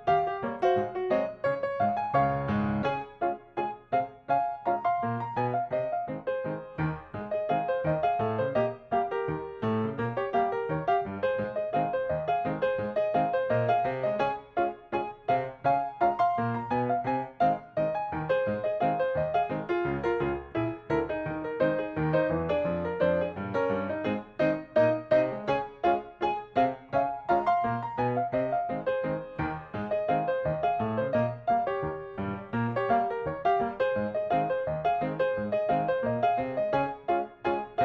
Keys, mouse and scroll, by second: 1.4 shift+middle click, 1.7 scroll down 1, 2.0 middle click, 2.3 scroll up 1, 2.9 click, 3.1 middle click, 3.6 right click, 4.8-15.0 drag, 15.7 space, 15.8 click, 16.1 middle click, 16.3 scroll down 1, 16.6 shift+scroll up 1, 16.7 middle click, 17.3 right click, 18.8 click, 19.5 middle click, 20.9 click, 21.2 scroll up 1, 21.7 typing, 22.4 click, 23.7 middle click, 24.6 scroll up 1, 24.9 click, 25.2 middle click, 25.9 click, 26.3 middle click, 27.4 click, 27.7 middle click, 28.3 click, 28.7 middle click, 29.1 click, 29.4 middle click, 31.0 click, 31.7 Delete, 31.9 middle click, 32.7 scroll up 1, 32.9 middle click, 33.5 scroll up 1, 33.9 click, 36.5 ctrl+click, 37.5 ctrl+click.